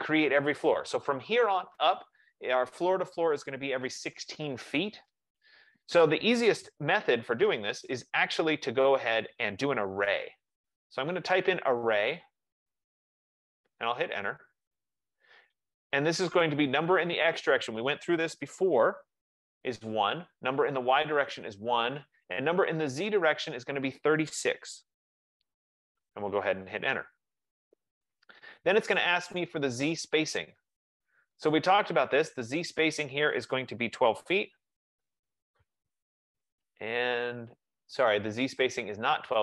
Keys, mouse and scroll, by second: 1.5 F15, 11.5-13.2 typing, 14.5 Return, 18.6 Return, 20.0 Return, 21.5 Return, 24.9 typing, 27.5 Return, 34.0-35.1 typing, 35.5 Return.